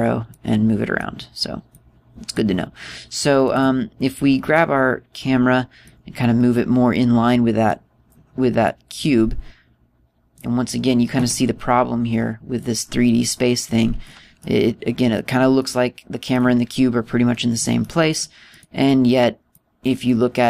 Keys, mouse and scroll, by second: 1.0 click, 2.4 click, 4.2 right click, 5.2 click, 7.2 middle click, 9.4 middle click, 13.3 click, 15.1 middle click, 16.3 middle click, 18.6 middle click, 19.2 right click, 20.3 click.